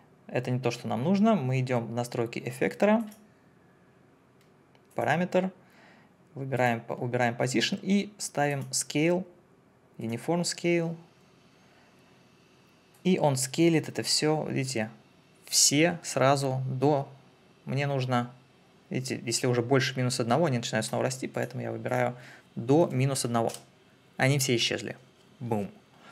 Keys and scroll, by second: 22.8 KP_Subtract, 23.1 1, 23.5 Return.